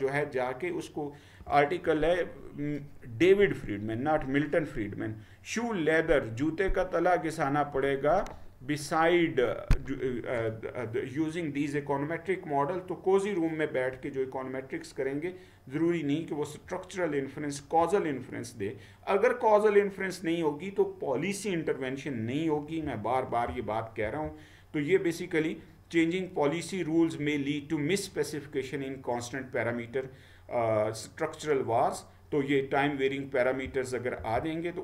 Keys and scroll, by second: 24.1 Down, 33.7 Down, 34.4 Down.